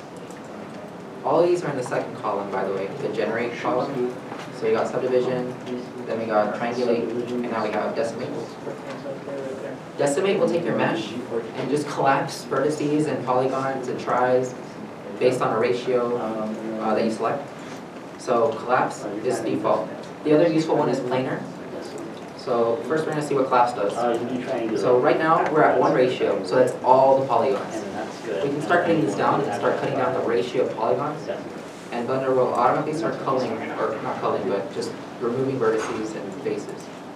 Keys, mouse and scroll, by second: 9.5 scroll down 1.